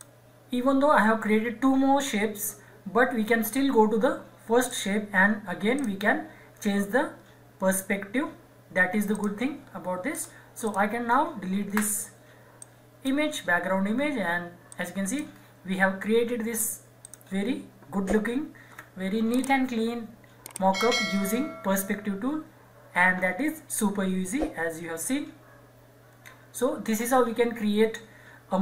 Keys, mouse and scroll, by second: 0.6-1.0 scroll down 1, 2.8-3.2 scroll up 1, 4.6 click, 9.1 click, 9.6-10.1 scroll down 1, 10.1 click, 11.8 Delete, 12.6 click, 13.4 scroll up 1, 14.7-17.0 shift+drag.